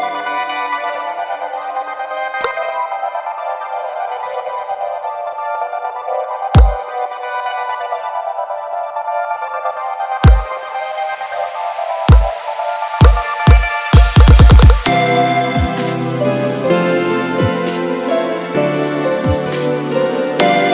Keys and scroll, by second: 18.1 Caps_Lock.